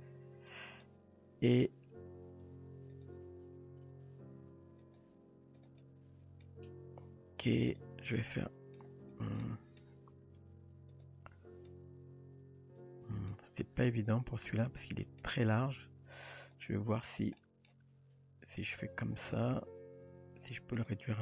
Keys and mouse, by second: 0.8-1.6 middle drag, 2.4 r, 3.1 g, 5.5 r, 5.8-6.4 middle drag, 8.1-8.8 middle drag, 9.4-9.8 middle drag, 11.8-13.3 middle drag, 14.5-15.2 middle drag, 16.5 click, 17.4 middle drag, 17.9 g, 19.3 click, 19.6 g.